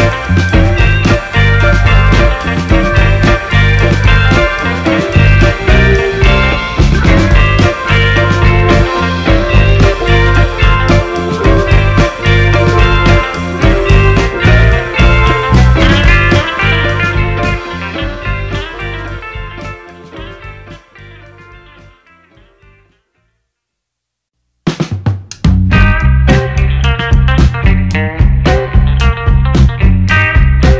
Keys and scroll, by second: 4.1 space, 11.9 shift+a, 13.5 Return, 16.4 shift+a, 17.1 ctrl+c, 17.9 ctrl+v, 20.1-23.2 typing, 26.7 ctrl+a, 30.6 Delete.